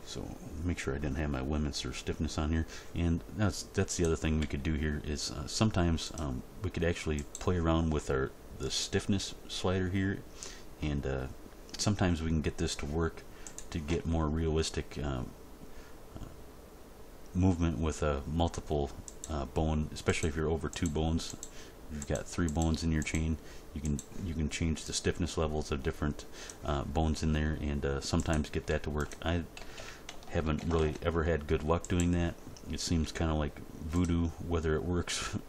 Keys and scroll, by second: 4.4 g, 13.9 g, 28.7 g, 29.5 a, 30.4 alt+r, 30.6 alt+g, 30.8 alt+s, 33.0 g.